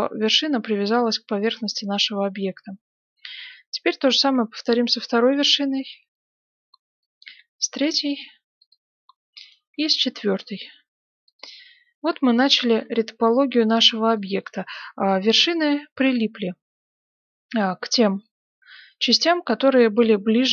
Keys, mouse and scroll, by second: 1.0-3.2 middle drag, 2.8 right click, 4.2 g, 4.4 middle click, 6.9 right click, 8.2 g, 9.4 right click, 9.7 g, 11.6-15.0 middle drag, 15.2 right click, 16.3 g, 18.1-20.1 middle drag, 18.6 g, 20.3-20.5 middle drag.